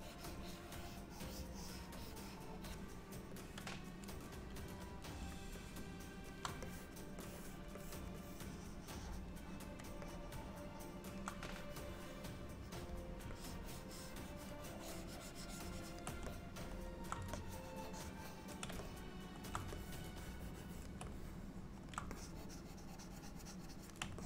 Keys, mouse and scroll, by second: 3.5 click, 5.7 alt+middle click, 6.8 click, 7.3 click, 7.9 click, 8.3 click, 10.1 alt+middle click, 11.6 click, 13.4 ctrl+click, 16.3 middle click, 17.4 ctrl+click, 18.9 middle click, 19.8 ctrl+click, 21.2 middle click, 22.2 ctrl+click.